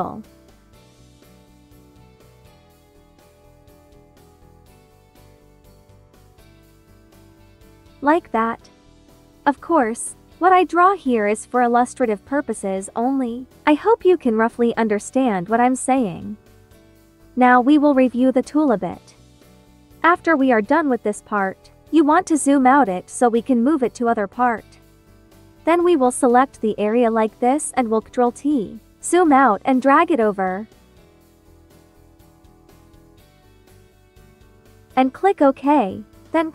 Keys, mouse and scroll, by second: 0.4 click, 0.8 ctrl+z, 1.1 space, 1.2 click, 1.6 space, 3.7 click, 7.0 typing, 7.6-8.8 drag, 8.8 click, 10.9 ctrl+z, 11.0 ctrl+click, 17.0 space, 18.5 2, 19.2 space, 19.4 click, 19.7 space, 21.8-27.4 drag, 27.4 ctrl+t, 28.9-32.6 drag, 32.6 space, 32.7 click, 33.1 space, 33.4-35.1 drag.